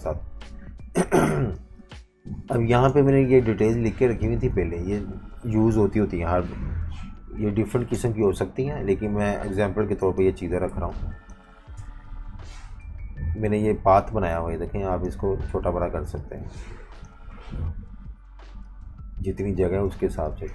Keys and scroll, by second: 0.2 F19, 1.0-4.5 typing, 7.0 super+-, 7.2 super+-, 7.8 typing, 10.7 z, 10.8 z, 11.8 shift+super+], 12.8 v, 19.9 v, 20.1 space.